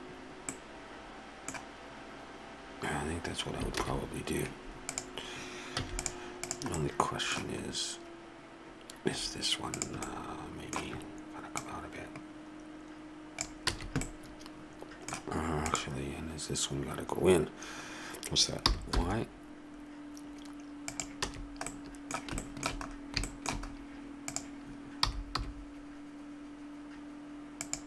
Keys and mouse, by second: 3.9 shift+z, 5.8 x, 6.8-8.4 middle drag, 9.8 right click, 10.3-11.3 middle drag, 11.5 middle click, 13.7 a, 15.7 right click, 18.6 g, 20.8 click, 21.3 a, 23.8 right click, 25.0 g.